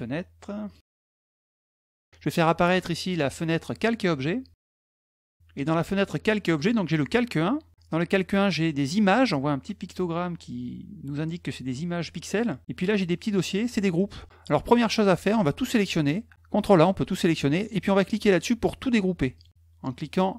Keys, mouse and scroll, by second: 0.4 click, 2.4 click, 3.6 click, 4.3 middle click, 4.8 click, 6.2 click, 12.8 click, 13.4 click, 14.8 click, 15.5 click, 19.1 click, 19.3 click, 19.4 click.